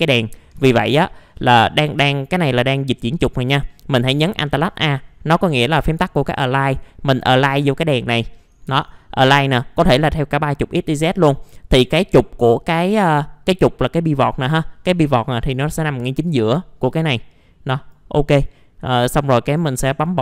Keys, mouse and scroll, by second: 0.2-0.6 scroll down 1, 0.6 alt+middle click, 1.9 w, 2.6 click, 3.7 middle click, 4.1 scroll down 1, 4.5 alt+a, 7.5 click.